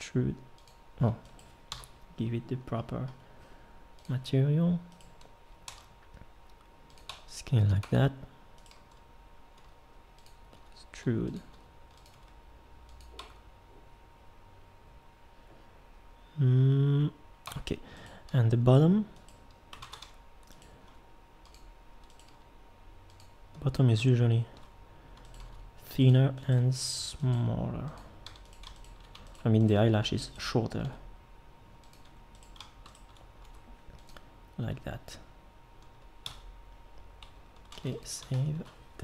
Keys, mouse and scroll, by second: 1.7 l, 5.7 s, 7.1 Tab, 7.8 Tab, 9.6 g, 10.5 e, 11.5 r, 12.1 g, 13.2 Tab, 17.4 Tab, 19.8 ctrl+Tab, 20.9 g, 22.3 g, 25.5 g, 26.6 g, 30.8 g, 33.4 g, 36.2 Tab, 37.7 ctrl+s.